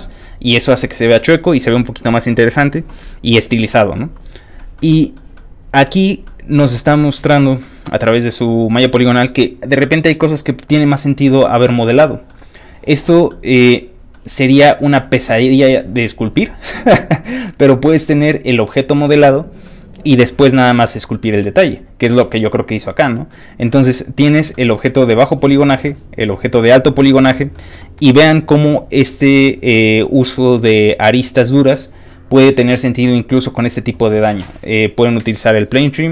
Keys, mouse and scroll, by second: 3.9 middle click, 4.7 middle click, 5.3 middle click, 6.2 middle click, 7.6 middle click, 11.7 middle click, 13.3 middle click, 19.6 middle click, 23.3 middle click, 23.3 scroll down 1, 23.7 scroll down 2, 23.8 middle click, 24.1 scroll up 3, 24.1 middle click, 24.5 middle click, 24.8 middle click, 25.8 middle click, 26.9-36.1 middle drag.